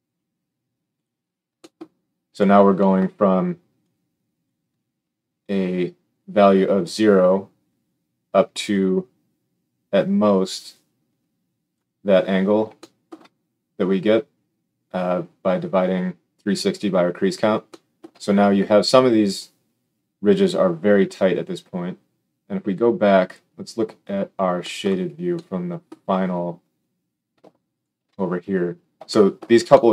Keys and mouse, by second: 3.8-23.3 drag, 23.3-27.7 middle drag, 27.7 alt+shift+click, 27.8-29.9 alt+shift+middle drag.